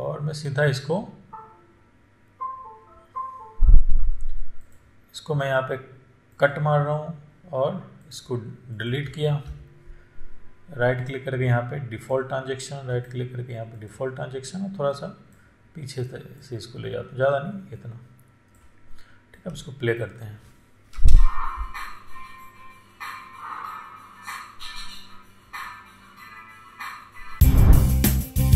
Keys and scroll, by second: 9.7 Delete, 21.3 space.